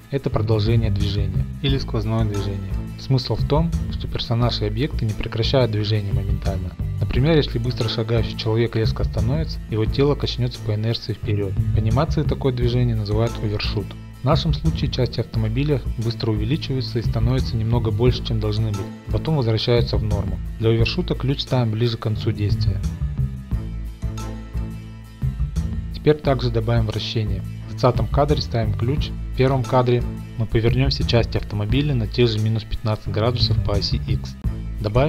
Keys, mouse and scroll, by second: 17.5 click, 17.8 Home, 18.3 middle click, 20.0-21.5 drag, 22.6 click, 22.9 shift+middle click, 23.0 click, 23.1 g, 23.3 click, 24.2 click, 24.4-26.5 typing, 24.7 click, 25.0 middle click, 25.3 click, 25.4 middle click, 25.5 middle click, 25.5 shift+middle click, 25.6 middle click, 25.7 click, 28.3 click, 29.4-30.7 drag, 30.2-31.3 typing, 31.7 Return, 33.0 i, 33.4-35.0 drag.